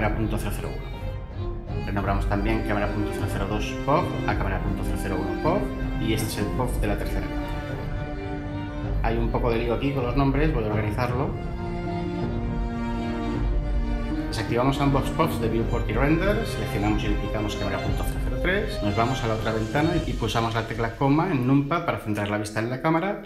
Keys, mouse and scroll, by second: 1.4 1, 2.1 Return, 4.3 Delete, 4.6 1, 4.9 Return, 7.1 0, 8.0 3, 8.6 Return, 10.5 Delete, 11.1 Return, 13.2 BackSpace, 14.5 Return, 18.0 shift+d, 18.7 ↻.